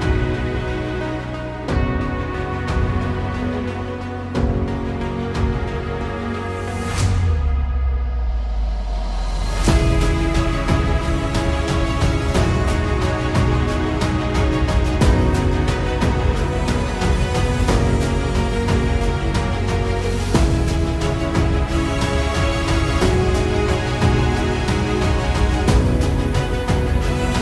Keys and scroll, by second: 0.2 shift+d, 0.8 y, 2.9 shift+d, 3.3 y, 6.2 shift+d, 6.6 y, 9.2 shift+d, 9.5 y, 12.9 KP_0, 22.3-24.3 typing, 25.7 g, 25.8 y, 27.0-27.4 typing.